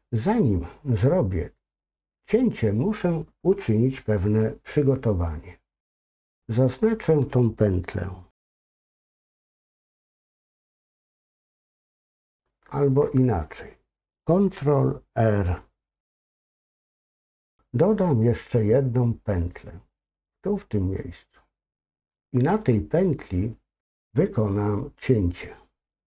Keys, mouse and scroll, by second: 5.7 click, 11.0 alt+shift+click.